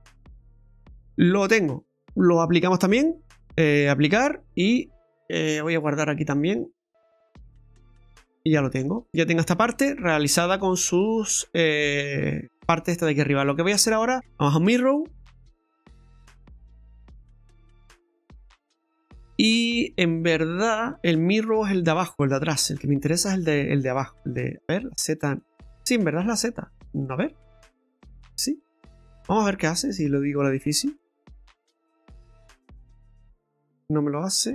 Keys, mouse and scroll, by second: 0.3-0.8 scroll down 4, 0.5 middle click, 0.8 scroll up 1, 0.9-2.9 scroll down 1, 2.9 click, 6.4 click, 8.2 scroll down 2, 8.5 shift+middle click, 9.4 Tab, 9.8 scroll down 1, 10.0 middle click, 10.5 right click, 10.8 middle click, 13.2 scroll down 1, 13.5 middle click, 13.8 scroll up 1, 14.1 Tab, 14.1 click, 14.9 click, 18.5 middle click, 21.4 scroll down 1, 21.5 middle click, 22.8 click, 23.3 click, 23.9 click, 24.6 click, 25.0 click, 25.4 click, 27.0 middle click, 29.9 click, 31.8 middle click.